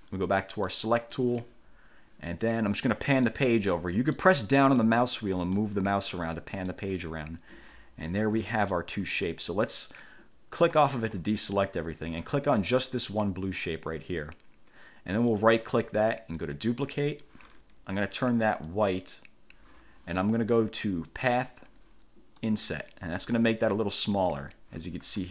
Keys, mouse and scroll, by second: 0.8 click, 3.0 middle click, 3.9 middle click, 5.0 middle click, 5.7-7.0 middle drag, 10.8 click, 13.2 click, 15.4 right click, 16.5 click, 18.8 click, 21.2 click, 22.6 click.